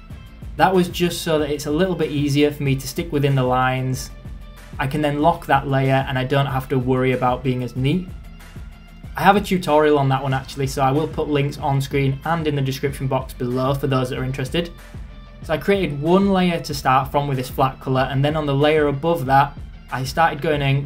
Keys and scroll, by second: 0.0 ctrl+z.